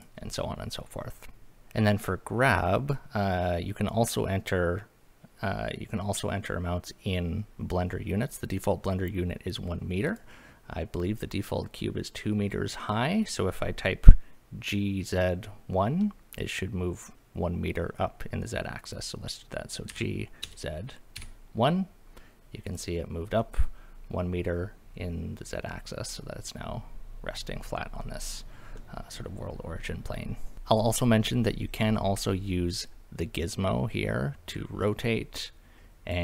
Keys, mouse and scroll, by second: 10.1 click, 19.9 g, 20.4 z, 21.2 KP_1, 22.7 click, 23.4-25.8 middle drag, 26.2-27.9 middle drag, 28.8-29.5 middle drag, 30.5 click, 32.7-36.1 drag.